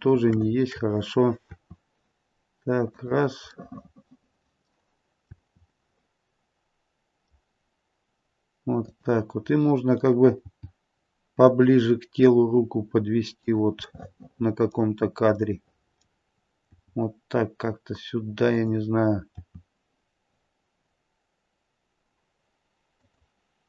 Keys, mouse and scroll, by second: 0.4 shift+middle click, 1.5 r, 3.5 middle click, 5.3 r, 10.4 g, 13.8 middle click, 14.9-15.3 scroll down 1, 15.3 middle click, 16.7 g, 19.3 r.